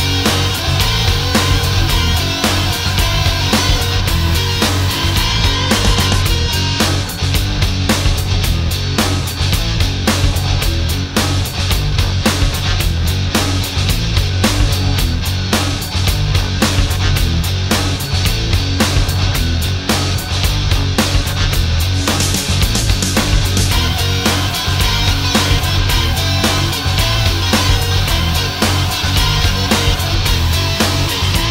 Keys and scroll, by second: 10.6 alt+space, 14.0 space, 15.8 alt+space, 25.1 ctrl+shift+a, 31.0 ctrl+shift+a.